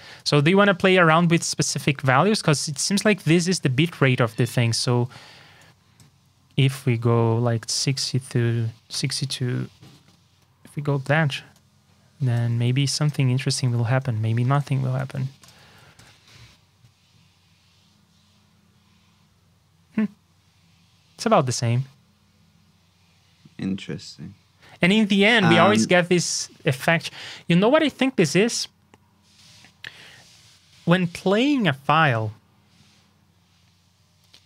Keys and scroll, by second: 12.6 super+c, 14.9 super+c, 15.6 super+v.